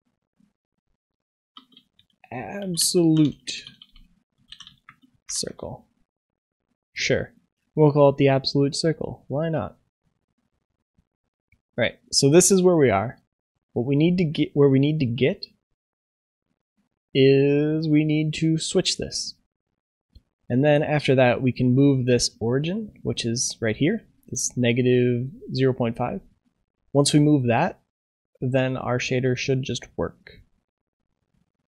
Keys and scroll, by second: 5.4 ctrl+s.